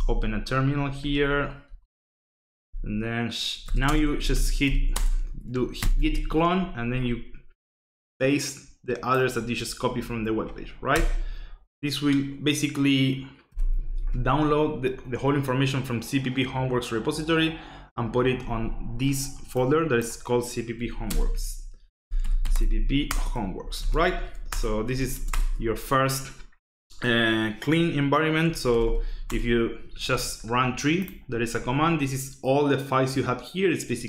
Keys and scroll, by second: 1.3 ctrl+shift+=, 1.7 ctrl+shift+=, 3.3-5.1 typing, 5.8 ctrl+shift+v, 10.9 Return, 13.5 y, 13.8 s, 14.0 Return, 20.5-25.5 typing, 23.1 Return, 28.2-29.3 typing.